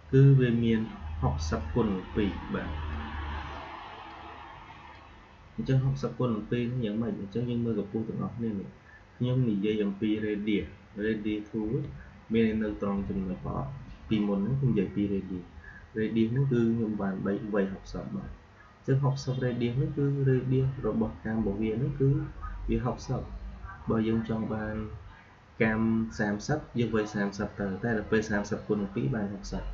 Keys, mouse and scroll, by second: 1.5-7.4 drag.